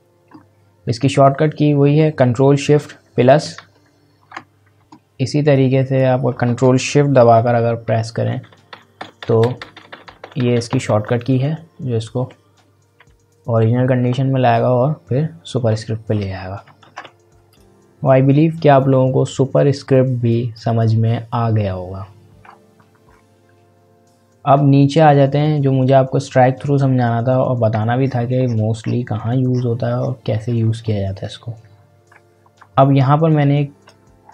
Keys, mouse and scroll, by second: 2.8 ctrl+shift+=, 4.8-5.5 ctrl+scroll down 1, 5.5-7.3 drag, 7.3 ctrl+shift+=, 16.6 ctrl+shift+=, 16.8 ctrl+z, 17.5 click, 23.0-23.5 scroll down 1, 24.5-25.9 scroll up 1, 27.8 scroll up 1, 28.0-28.4 ctrl+scroll down 1, 28.8-29.7 scroll down 3, 31.2 ctrl+scroll up 1, 32.2-32.7 ctrl+scroll up 1, 33.4 click, 34.2 scroll up 1.